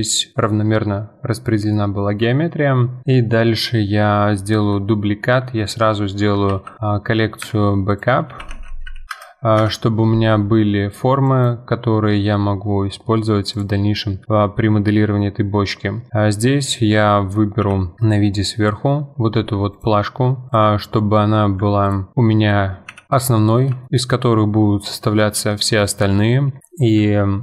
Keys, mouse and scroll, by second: 2.2 Tab, 2.7-6.2 middle drag, 6.5 shift+d, 7.4 m, 9.1 BackSpace, 11.3-12.6 drag, 12.6-13.2 middle drag, 13.2 click, 13.5 click, 14.3-16.0 middle drag, 16.0-17.0 scroll up 2, 17.0-17.6 scroll up 1, 17.6 KP_7, 18.3-19.0 middle drag, 19.0 Tab, 19.3 3, 19.7 click, 20.5 shift+click, 20.8-21.8 middle drag, 21.8 ctrl+click, 22.1 middle click, 22.9 KP_7, 23.8-26.6 shift+middle drag.